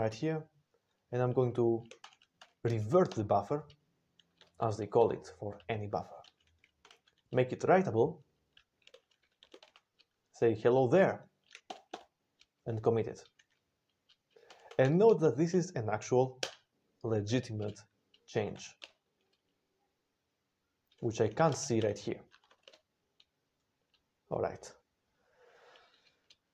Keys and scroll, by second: 2.0 ctrl+x, 2.7-3.5 typing, 4.3 ctrl+n, 4.5 ctrl+n, 4.7 ctrl+n, 4.9 ctrl+n, 6.7 ctrl+x, 7.8 ctrl+q, 8.8-10.1 typing, 11.6 ctrl+c, 11.8 ctrl+c, 14.3 ctrl+x, 14.7 b, 16.3 Return, 18.0-18.7 typing, 21.0-22.3 typing, 22.5 Return.